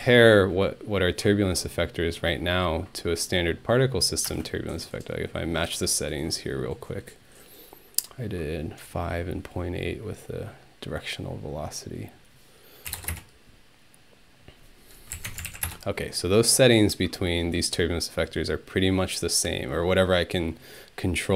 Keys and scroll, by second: 0.0-0.4 typing, 4.3 space, 12.7-13.6 typing, 15.1-15.5 typing, 15.3 Tab, 15.7 Return.